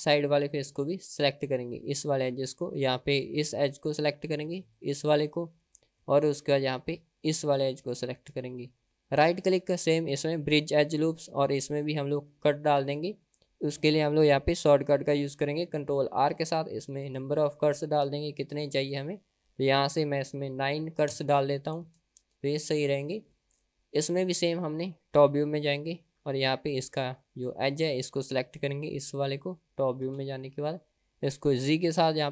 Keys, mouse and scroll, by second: 0.7 KP_1, 4.7 click, 7.5 shift+click, 8.9 middle click, 9.3-11.1 right drag, 12.3 middle click, 16.3 ctrl+r, 19.8-22.4 drag, 23.3-24.5 middle drag, 25.3 KP_7, 26.9 click, 27.3 middle click, 28.6 click, 29.3 middle click, 30.1 KP_7, 31.9 g.